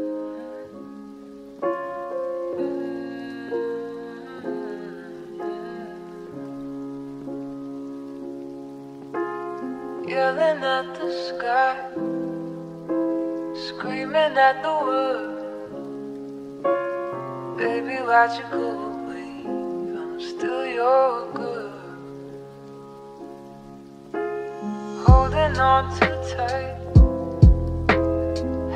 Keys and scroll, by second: 3.1 0, 9.8 space, 14.4 s.